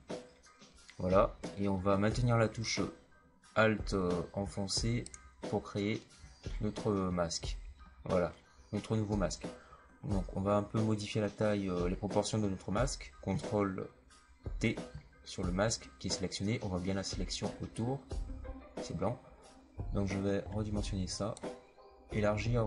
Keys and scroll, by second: 14.4 ctrl+t.